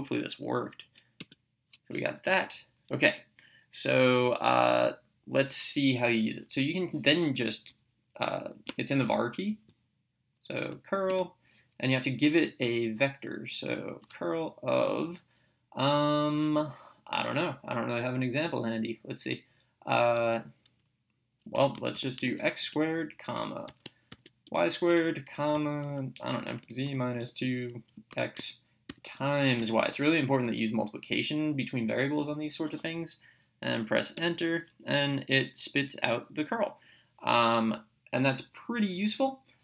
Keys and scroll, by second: 1.3 Return, 11.1 Return, 13.9 (, 21.4-29.6 typing, 30.3 Right, 34.2 Return.